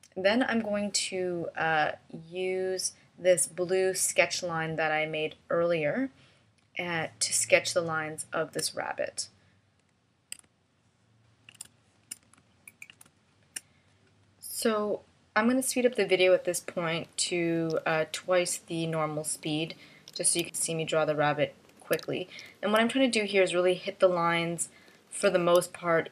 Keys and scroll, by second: 7.6 space, 12.6 space, 14.0 space, 18.2 space, 20.6 space, 22.1 space, 22.9 space, 25.8 space.